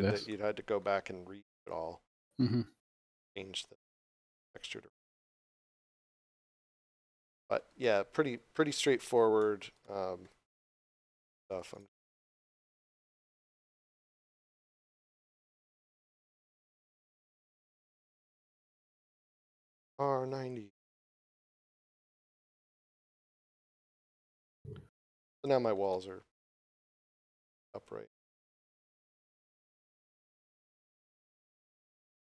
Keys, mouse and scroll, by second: 0.2 scroll up 1, 0.3 shift+middle click, 0.8 scroll up 1, 1.7 click, 4.6 r, 7.1 middle click, 8.5 scroll up 1, 9.4 middle click, 11.3 right click, 11.7 shift+right click, 12.0 shift+right click, 12.3 shift+right click, 12.8 shift+right click, 13.1 shift+right click, 13.5 middle click, 16.1 shift+right click, 16.6 shift+right click, 19.9 r, 22.1 Return, 23.4 middle click, 24.1 scroll down 1, 25.1 middle click, 25.9 shift+middle click, 27.2 shift+middle click, 29.3 middle click, 30.4 shift+middle click.